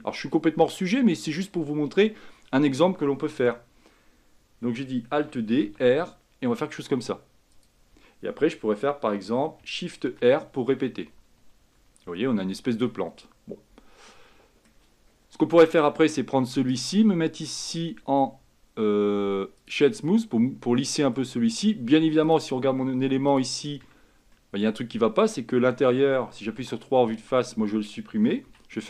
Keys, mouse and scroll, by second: 5.3 alt+d, 10.3-12.6 typing, 13.3-15.0 middle drag, 15.0-15.8 scroll up 3, 15.8-16.8 drag, 16.8-19.8 right drag, 20.2-21.6 middle drag, 21.6-22.4 scroll up 3, 22.4-23.5 drag, 23.9 Tab, 24.4-26.7 middle drag, 26.7 3, 27.2-28.6 drag, 28.6 x.